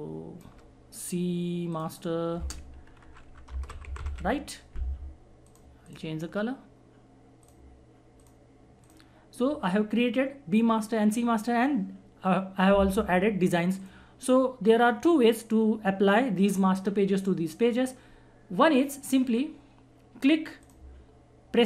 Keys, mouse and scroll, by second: 2.4-4.9 typing, 5.4 click, 13.8 click, 20.6 click, 20.6 click.